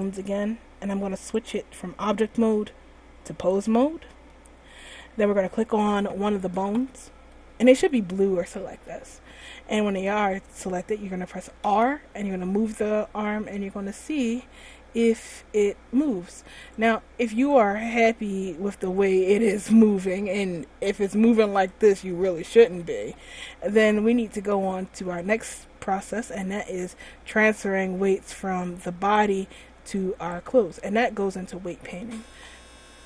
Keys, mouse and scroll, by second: 0.4 right click, 1.5 click, 4.5 middle click, 6.2 right click, 7.4 middle click, 7.6 middle click, 7.8 middle click, 8.0 middle click, 8.5 middle click, 11.9 r, 17.7 right click, 17.9 r, 22.3 a, 22.6 a, 23.1 alt+r, 24.2-24.9 scroll up 1, 24.9-25.7 scroll down 1, 26.8-27.4 scroll up 1, 27.7 scroll down 1, 29.1 right click, 30.4 right click, 31.9 middle click.